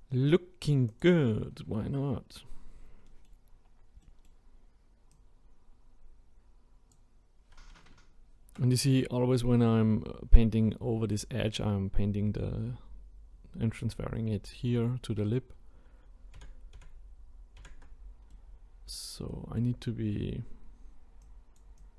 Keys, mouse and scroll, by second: 0.9-3.1 drag, 3.1 middle click, 3.4-4.0 scroll up 3, 4.0-4.4 middle drag, 4.4-5.1 scroll up 1, 5.1-8.2 drag, 16.4 ctrl+z, 16.8 ctrl+z, 18.3-21.2 middle drag, 21.2-21.9 drag.